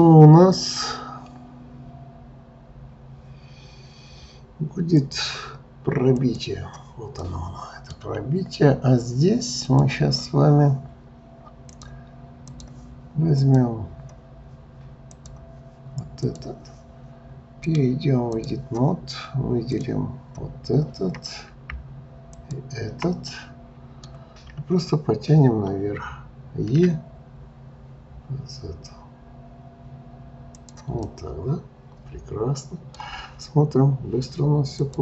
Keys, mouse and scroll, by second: 5.0-7.2 drag, 7.2-9.7 middle drag, 9.7 click, 11.7-13.5 drag, 15.0 click, 16.3 click, 17.7-19.8 drag, 22.3 shift+click, 23.3-24.4 middle drag, 24.4-26.0 scroll down 1, 26.7 e, 31.0-34.1 middle drag.